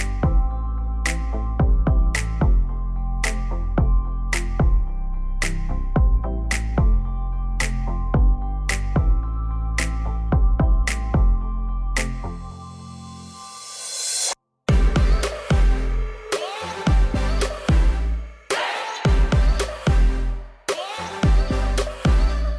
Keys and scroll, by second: 6.4 Delete.